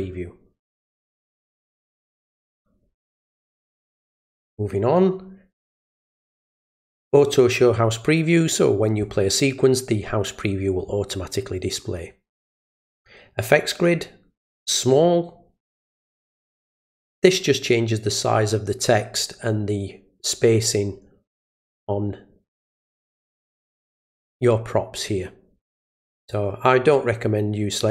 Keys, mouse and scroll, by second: 2.2 click, 3.1 click, 12.9 click, 26.2 click.